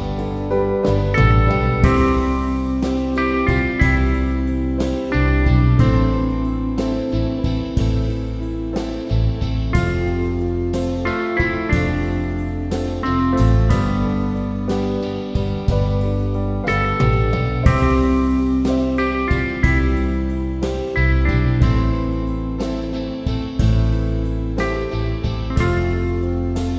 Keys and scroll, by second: 6.1 Up, 13.4 Up, 13.5 Up, 13.6 Up, 13.8 Up.